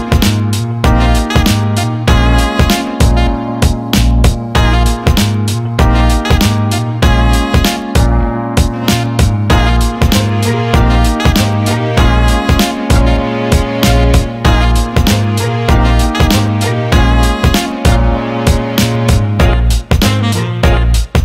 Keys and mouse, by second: 1.8 g, 4.4 click, 4.9 g, 6.8 click, 7.2 g, 10.1-12.6 ctrl+middle drag, 12.6 click, 12.8 click, 14.0 shift+click, 14.9 shift+click, 16.3 shift+click, 17.5 shift+click, 18.9 shift+click, 19.7 shift+click, 20.9 ctrl+b.